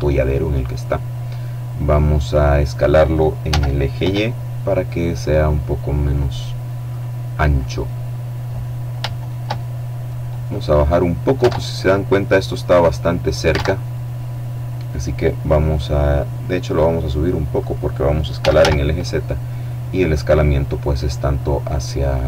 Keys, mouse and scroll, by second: 2.8 s, 3.4 y, 5.4 click, 6.2 click, 7.2 middle click, 8.1 scroll up 1, 8.4 shift+middle click, 8.9 shift+middle click, 10.0 middle click, 10.2 click, 10.8 alt+Tab, 13.0 alt+Tab, 16.1-17.6 drag, 17.7 s, 17.9 z, 20.3 click, 21.1-22.2 drag.